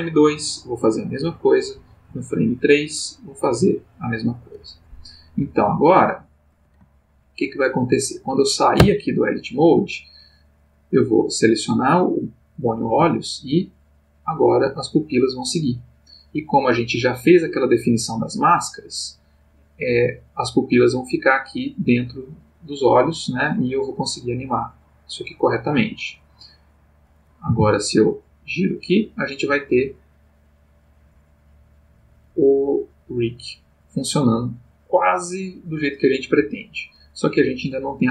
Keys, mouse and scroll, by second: 1.1 click, 2.1 Right, 3.6 click, 5.8-6.7 drag, 7.0 ctrl+middle click, 8.7 Tab, 11.0 click, 12.9 g, 25.7 Escape, 26.7 click, 27.5 r, 36.3 Escape, 37.4 click, 38.0 g.